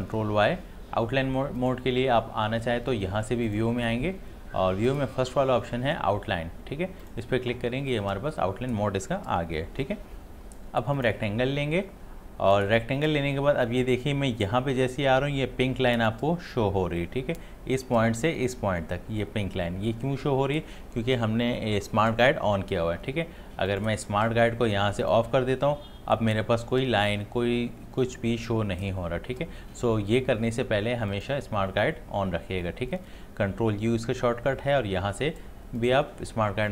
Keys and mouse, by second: 1.6 click, 3.8 click, 7.0 click, 11.0 click, 23.7 click, 31.1 click, 35.8 click.